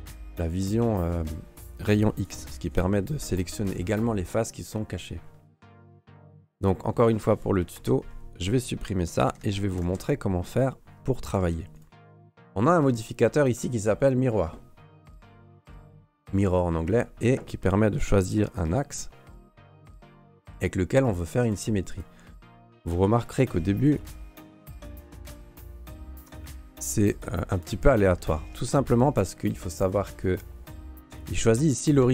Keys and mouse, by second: 0.8 alt+middle click, 1.1 alt+middle click, 1.8 click, 2.7 Delete, 5.7 click, 6.0 Delete, 7.7 ctrl+s, 8.1 middle click, 9.2 ", 9.6 shift+middle click, 9.9 ctrl+s, 11.3 Tab, 11.7 right click, 12.8 click, 13.5-16.6 drag, 19.8 click, 20.4 click, 21.0 click, 21.4 click, 21.9 click, 22.8 click, 23.2 click, 23.8 click, 25.0 click, 26.0 click, 26.7 click, 27.1 click, 27.5 click, 28.4 shift+middle drag.